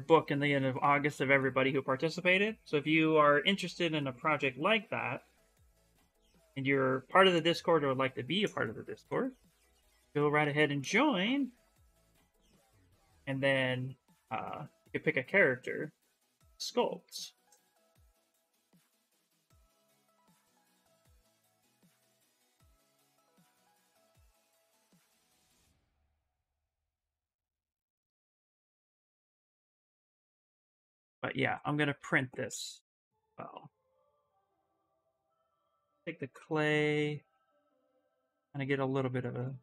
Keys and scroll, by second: 3.2 x, 18.9 s, 28.3 x, 35.3-36.6 typing.